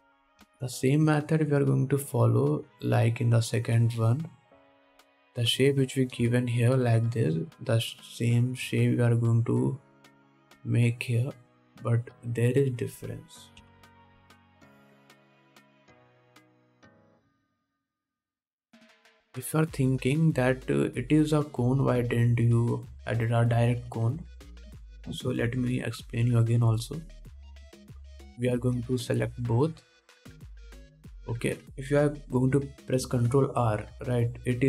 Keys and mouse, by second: 1.7 ctrl+Tab, 1.9-3.3 middle drag, 3.3-4.5 drag, 4.5 middle click, 4.6 click, 5.0 middle click, 5.0-6.1 drag, 6.1 middle click, 6.2-10.0 drag, 10.0 middle click, 11.7 middle click, 13.2 middle click, 14.8 KP_1, 16.1 middle click, 16.4 Tab, 16.8 alt+a, 17.3 ctrl+s, 17.3-22.7 ctrl+drag, 20.1 ctrl+Tab, 22.7 middle click, 23.1-28.5 shift+drag, 23.3 shift+a, 25.9 g, 28.5-29.5 middle drag, 28.9 Tab, 29.5 alt+a, 29.8 ctrl+Tab, 31.7 Tab, 32.2 alt+a, 34.3 ctrl+r.